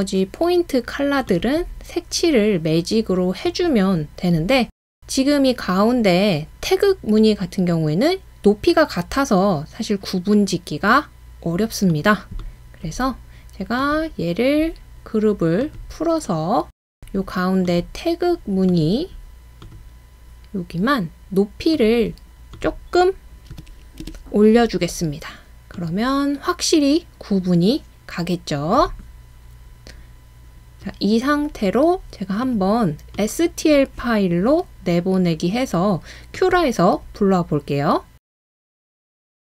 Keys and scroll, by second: 8.0 typing, 23.5-24.1 typing, 30.4 typing, 39.2 BackSpace.